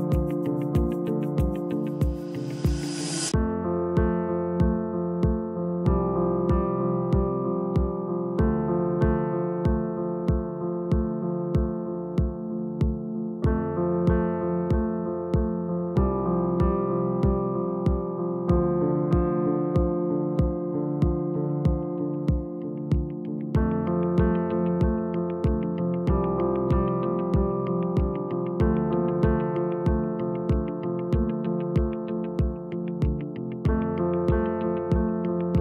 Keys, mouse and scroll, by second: 6.3-7.0 scroll down 3, 7.0 click, 7.4-8.0 scroll up 1, 8.0 click, 8.2 g, 10.0 click, 10.2 g, 22.3 click, 24.2-26.0 scroll down 1, 27.6 shift+a, 30.3 g, 32.5 click.